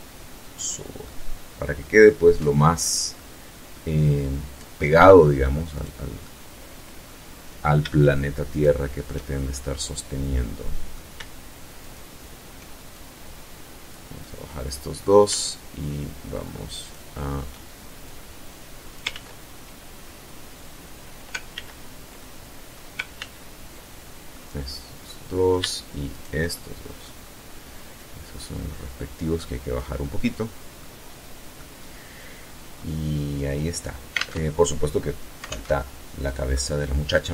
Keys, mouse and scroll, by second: 1.5-2.0 scroll up 2, 2.0 middle click, 4.6 right click, 5.0-6.0 middle drag, 7.3 shift+right click, 8.3-9.9 shift+middle drag, 10.6 shift+right click, 11.8-12.9 shift+drag, 13.0-13.9 middle drag, 15.6 shift+right click, 16.9-17.9 drag, 17.9 ctrl+z, 20.4 ctrl+z, 21.0 ctrl+click, 21.9 ctrl+z, 23.2 click, 24.0 middle click, 24.9 shift+right click, 25.2-25.9 shift+middle drag, 26.0 scroll down 2, 26.7-28.7 drag, 28.8 middle click, 29.7-30.1 scroll down 2, 30.4 middle click, 31.3 scroll down 2, 31.5-31.9 scroll up 2, 33.0 alt+Tab, 34.3 alt+Tab, 35.3-36.8 drag.